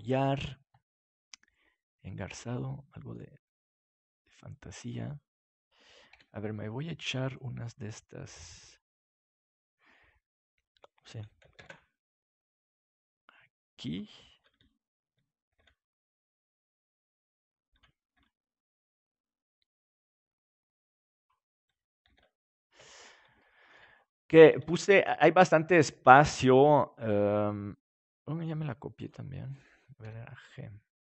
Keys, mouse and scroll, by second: 1.1 middle click, 6.1 KP_7, 11.5 shift+d, 13.8-15.6 drag, 15.4 shift+d, 15.6-17.4 middle drag, 18.0-19.2 drag, 18.0 shift+d, 21.2-22.4 drag, 22.4 shift+d, 27.0 g, 29.0-30.9 drag, 29.5-30.7 right drag, 30.0 g, 30.9 right click.